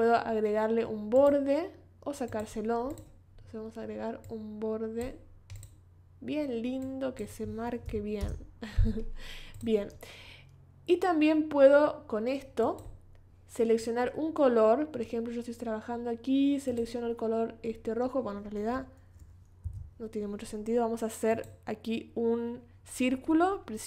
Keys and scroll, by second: 7.9 5, 8.2 Return, 19.6 o.